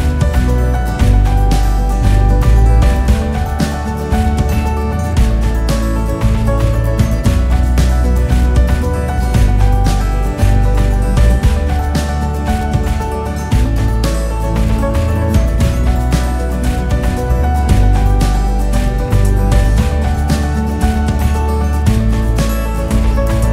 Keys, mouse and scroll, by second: 0.5 click, 1.7 alt+click, 2.4-3.3 scroll down 4, 3.3 e, 4.7 r, 7.2 click, 8.1 e, 9.8 r, 11.3 e, 12.9 e, 14.1 e, 15.7 r, 17.4 e, 18.8 r, 21.8 r, 23.3 e.